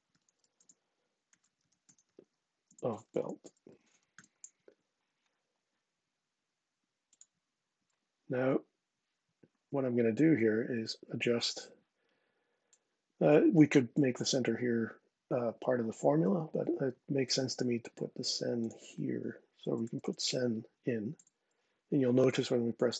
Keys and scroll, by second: 0.0-4.3 typing, 19.1-20.2 typing, 20.8 Tab.